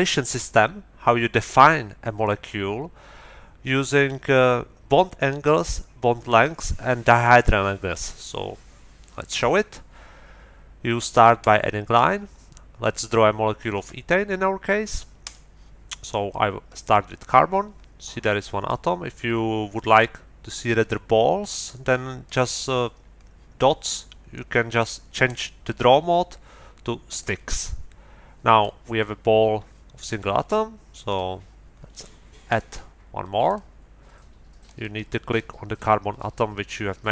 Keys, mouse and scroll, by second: 11.4 middle click, 15.2 middle click, 16.3-18.8 drag, 19.7-20.9 drag, 20.9 middle click, 22.2 middle click, 25.2 middle click, 27.1 click, 27.6-28.8 drag, 31.1 click, 32.5 click, 33.4 click, 34.6 click, 35.3-37.1 drag.